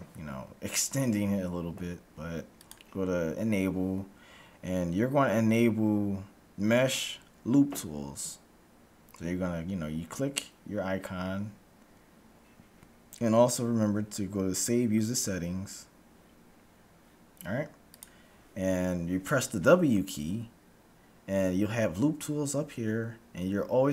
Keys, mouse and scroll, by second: 20.2 w.